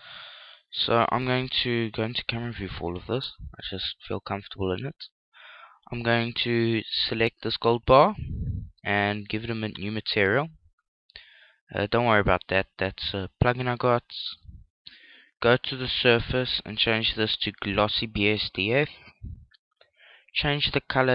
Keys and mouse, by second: 0.0 F11, 1.4 KP_0, 2.2-5.4 middle drag, 6.6-9.1 right drag, 8.3-17.2 drag, 19.5 click.